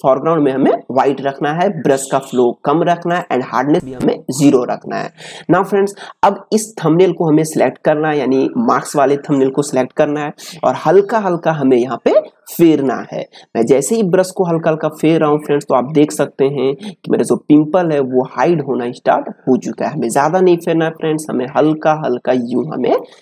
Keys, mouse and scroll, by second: 3.1 right click, 4.0 click, 6.8 click, 10.9-22.8 drag.